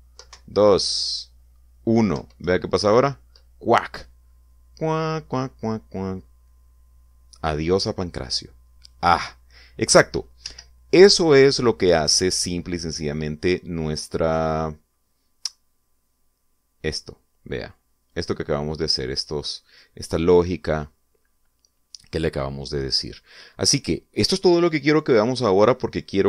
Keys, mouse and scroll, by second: 0.2 Right, 1.4 Down, 3.5 Up, 11.6 Escape, 19.2 click, 20.5 click.